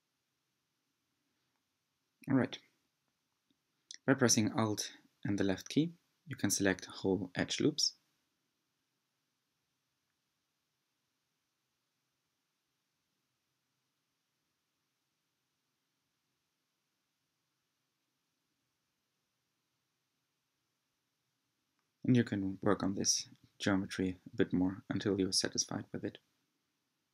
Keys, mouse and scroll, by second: 0.4 middle click, 0.7-1.1 scroll up 2, 1.1-1.9 shift+middle drag, 1.9 click, 2.5 Tab, 5.9-6.9 alt+drag, 6.9-8.8 scroll up 1, 8.8 s, 13.6 alt+click, 14.9 s, 19.6 Tab, 20.4 Tab, 22.0 scroll up 2, 25.2 click.